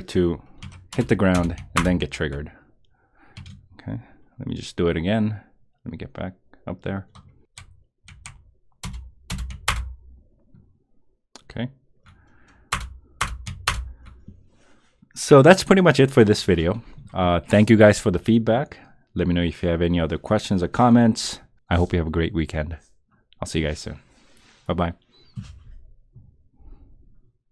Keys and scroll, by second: 0.9 Return, 1.7 Return, 8.8 Return, 9.7 Return, 12.7 Return, 13.7 Return.